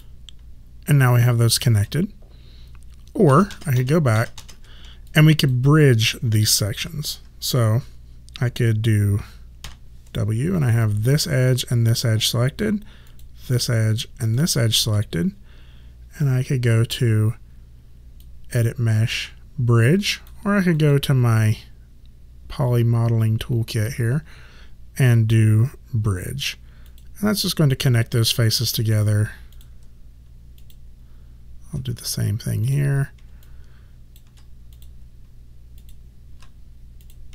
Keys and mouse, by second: 0.1 alt+click, 3.4 ctrl+z, 5.2 alt+click, 9.7 w, 10.7 click, 11.7 shift+click, 18.3 click, 20.9 click, 27.0 click, 28.2 alt+click, 30.7 shift+click, 33.5 alt+click, 35.9 shift+click.